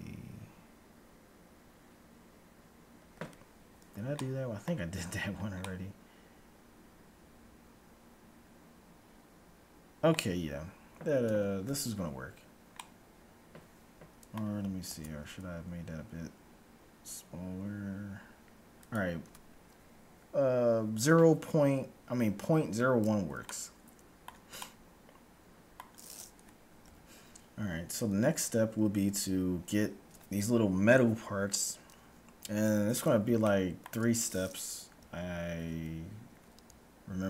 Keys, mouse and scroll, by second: 4.3 middle click, 5.0 Tab, 7.3 middle click, 10.5-11.3 scroll up 1, 11.3 Tab, 11.3-12.1 scroll up 1, 12.1 scroll up 1, 13.0-14.6 middle drag, 15.0 alt+s, 23.5-26.5 middle drag, 27.0 KP_1, 27.6-29.6 middle drag, 29.0 z, 33.6-35.0 middle drag, 35.0 a, 35.5 z.